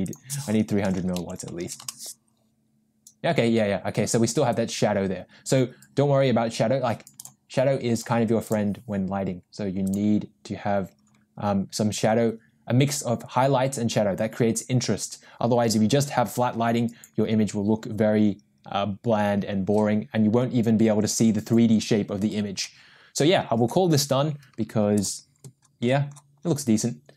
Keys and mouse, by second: 0.1-2.5 drag, 0.9 0, 7.2 click, 8.0 click, 9.9 click.